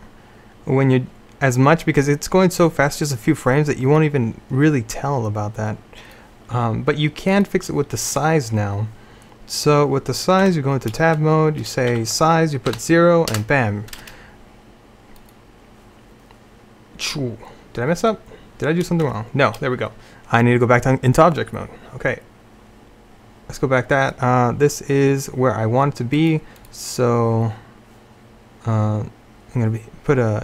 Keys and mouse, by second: 7.4-9.0 drag, 10.5 Tab, 12.0 s, 19.1 Tab, 27.2 click.